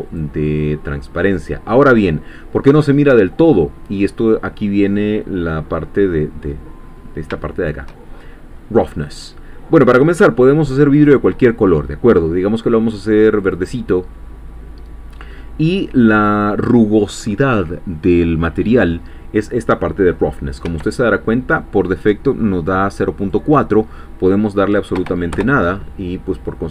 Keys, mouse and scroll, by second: 0.2 click, 2.6-5.0 middle drag, 6.0 middle click, 6.8-7.3 scroll up 2, 7.3 shift+middle click, 8.1 shift+scroll up 2, 8.3-11.0 shift+middle drag, 11.0 click, 13.4 click, 16.2 click, 20.6 Escape, 23.2-24.9 drag, 24.9 0, 25.3 Return.